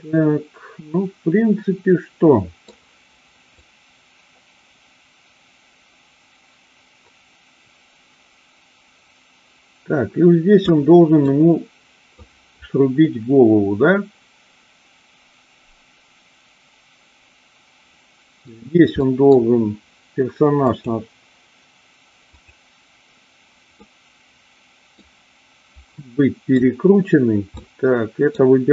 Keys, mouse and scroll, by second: 3.5-10.7 drag, 11.1-12.1 middle drag, 13.0-18.5 middle drag, 19.0 middle click, 20.6 click, 22.4 click, 23.7-24.9 middle drag, 25.9-26.6 middle drag, 27.6 middle click.